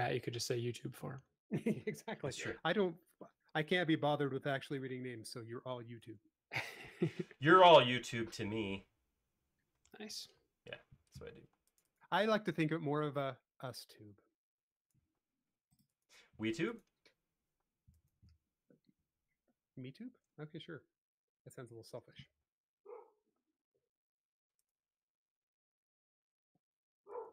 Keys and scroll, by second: 4.6 p, 6.5 space, 10.6-13.4 typing, 15.2 typing, 17.5 m, 22.0 Left, 22.5 space, 23.3 m.